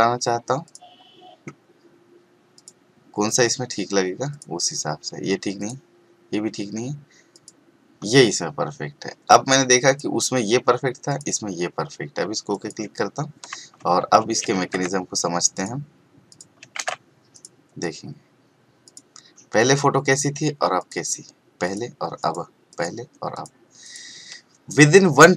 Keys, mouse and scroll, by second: 2.5 click, 9.9 click, 14.2 ctrl+a, 14.5 ctrl+c, 15.5 click, 16.8 ctrl+v, 17.3 click.